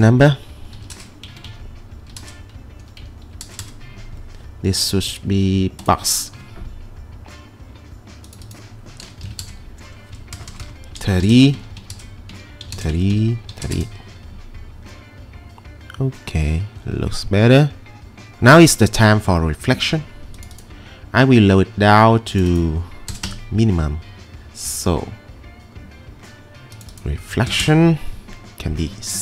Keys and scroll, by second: 0.5-3.9 typing, 1.4 Tab, 2.8 Tab, 9.0-11.9 typing, 13.1 Tab, 13.8 Return, 23.1 typing, 23.3 Return, 27.2-28.3 typing.